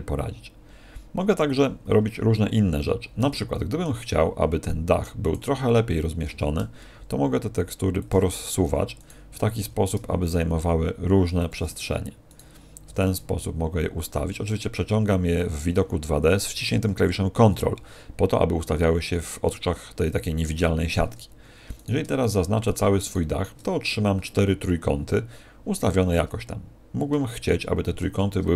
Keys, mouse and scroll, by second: 3.1 middle click, 5.2 right click, 6.2 g, 8.0 ctrl+click, 8.9 right click, 9.6 g, 11.4 ctrl+click, 12.2 right click, 12.8 g, 21.7 right click, 22.2 shift+right click, 22.6 shift+right click, 26.5-27.2 scroll up 2, 27.2 shift+middle click, 27.2 scroll up 1.